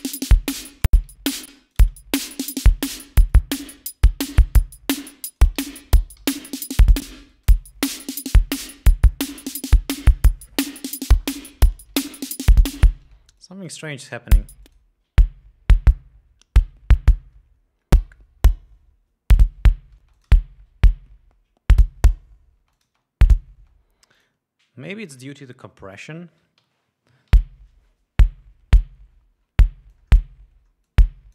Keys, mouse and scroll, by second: 0.3 click, 1.4 ctrl+scroll down 2, 1.7 ctrl+space, 1.8 ctrl+click, 3.6 click, 4.8-5.2 drag, 5.6 alt+click, 5.8 alt+d, 6.8 alt+d, 7.6 click, 7.6 space, 13.3 space, 13.6-14.1 drag, 14.6 space, 14.9 click, 20.3 space, 20.4 click, 22.9 space, 23.0 click, 23.8 space, 24.4 click, 26.2 click, 27.6 l, 30.2 click.